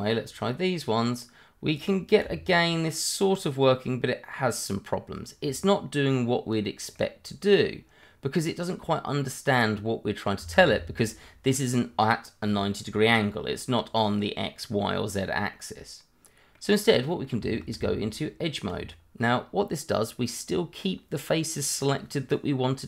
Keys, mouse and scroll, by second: 6.9 middle click, 10.4 Escape, 11.0 scroll down 1, 11.2 middle click, 15.1 scroll up 1, 15.6 middle click, 16.8 scroll up 1, 17.1 middle click, 17.5 shift+middle click, 17.8 Tab, 19.4-21.4 scroll up 1.